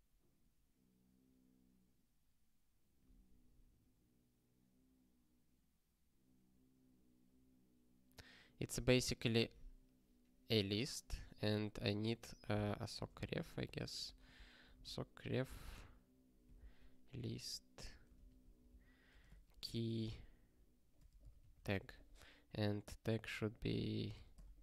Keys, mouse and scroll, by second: 12.7 ctrl+alt+@, 13.4-15.4 typing, 16.5 ctrl+alt+@, 17.4 ctrl+f, 18.1 ctrl+g, 18.3 ctrl+e, 18.7 ctrl+b, 19.0 space, 19.3 ", 20.9-21.9 typing, 23.4 click, 23.7-24.6 typing.